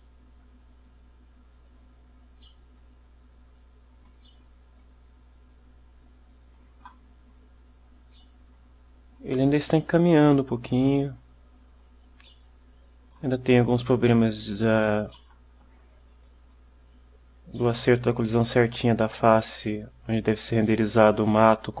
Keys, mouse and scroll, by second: 0.7-4.4 drag, 2.9 right click, 4.5-6.8 drag, 4.9-6.8 right drag, 7.4 right click, 8.6-11.2 right drag, 9.3 click, 11.4-13.4 right drag, 13.8-15.6 right drag, 15.5 click, 15.7-21.8 right drag, 20.2-21.8 drag.